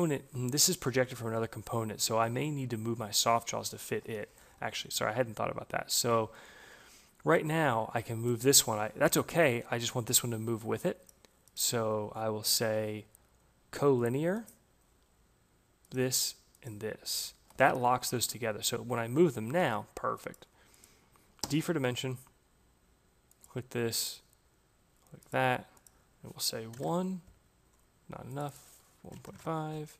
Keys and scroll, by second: 17.1 Escape, 21.3 d, 26.1 Return, 29.0 Delete, 29.2 Return.